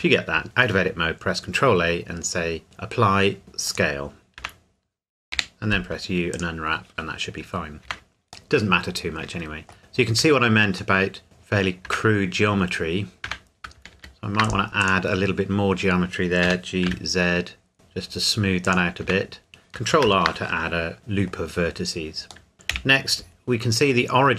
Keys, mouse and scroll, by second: 0.4 ctrl+a, 3.7 click, 4.4 Tab, 5.3 u, 6.3 click, 7.8 Tab, 8.5 middle click, 9.8-10.1 scroll up 1, 10.1 Tab, 11.0 middle click, 11.8 Tab, 14.0 ctrl+r, 14.4 click, 15.3-16.4 scroll up 1, 16.4 g, 16.8 z, 17.7-18.6 scroll up 1, 18.6 click, 19.0 Tab, 20.8 scroll down 1, 21.0 middle click, 21.6-22.4 scroll down 1, 22.7 KP_1.